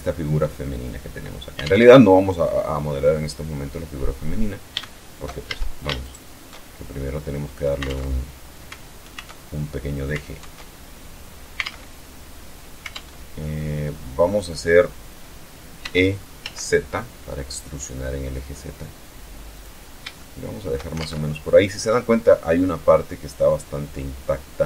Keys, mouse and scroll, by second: 2.3 click, 5.0 alt+shift+a, 5.6 alt+shift+right click, 6.6-7.4 shift+middle drag, 7.4 alt+Tab, 9.0-9.3 alt+scroll down 2, 10.0 alt+Tab, 10.4-10.8 scroll down 2, 11.2 alt+Tab, 12.5 alt+Tab, 13.4 click, 15.4 e, 15.9 z, 19.1 click, 19.7-20.4 shift+middle drag, 20.6 alt+shift+Tab.